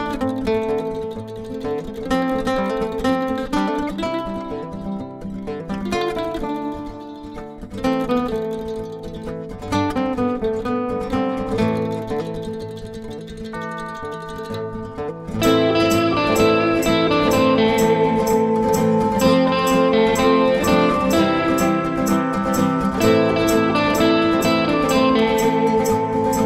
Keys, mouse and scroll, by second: 0.8 click, 4.4 click, 5.6 click, 7.5 click, 7.8 double click, 8.5 ctrl+click, 9.4 ctrl+r, 10.0 click, 11.0 click, 11.9 ctrl+click, 13.7 click, 14.9 ctrl+click, 17.5 click, 18.3 double click, 19.7 click, 22.2 click, 23.0 click, 23.9 click.